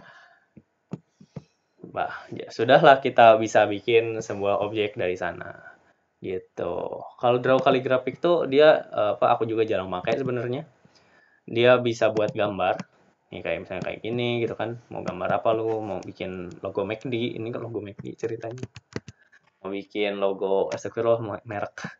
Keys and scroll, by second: 20.3 ctrl+z.